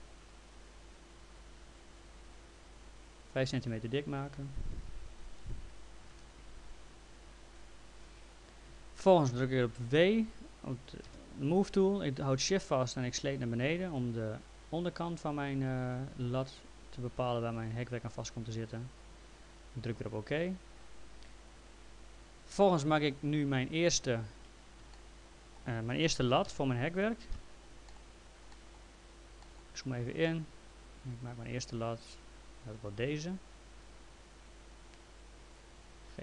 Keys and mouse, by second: 2.0 click, 3.3 click, 4.7 BackSpace, 6.0 5, 6.1 Return, 6.1 KP_Enter, 9.3 w, 10.2 right click, 11.1 w, 12.8 shift+click, 20.0 click, 22.8 click, 24.9 middle click, 26.5 f, 27.4 l, 27.9 middle click, 28.6 middle click, 30.6 click.